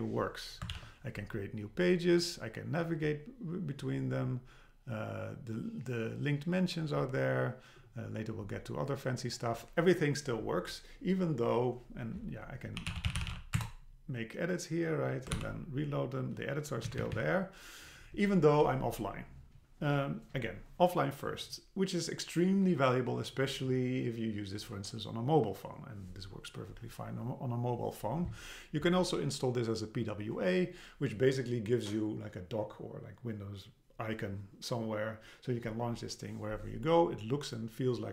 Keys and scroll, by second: 0.7 super+k, 13.6 Return, 15.3 super+r, 16.9 Down.